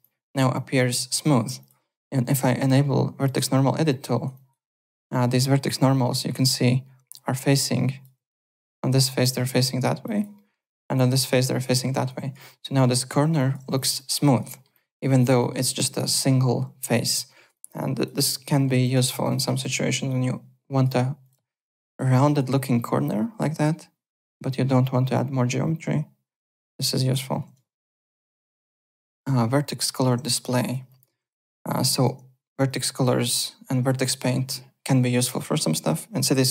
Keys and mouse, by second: 0.0 alt+click, 1.5 click, 3.2 click, 3.8 alt+middle click, 4.1 alt+right click, 4.3 alt+click, 4.6 alt+right click, 5.9 alt+middle click, 6.1 alt+right click, 7.6 alt+click, 10.0 alt+click, 10.3 alt+middle click, 10.6 alt+click, 11.5 alt+click, 12.0 alt+right click, 12.1 alt+click, 12.6 alt+middle click, 12.8 alt+right click, 13.3 alt+click, 13.6 `, 13.7 click, 13.7 click, 13.9 alt+click, 14.2 alt+right click, 14.5 alt+middle click, 14.7 alt+click, 15.4 alt+middle click, 15.5 alt+right click, 15.7 alt+click, 16.9 `, 17.0 click, 17.2 alt+right click, 17.5 alt+click, 18.1 click, 18.5 middle click, 18.8 click, 19.0 w, 19.2 click, 19.5 w, 20.0 click, 21.2 click, 21.2 `, 21.5 click, 21.6 middle click, 21.9 alt+click, 22.7 alt+click, 24.5 alt+click, 27.4 alt+Tab, 27.9 alt+click, 30.6 alt+click, 31.2 click, 31.7 alt+middle click, 31.9 alt+click, 32.6 click.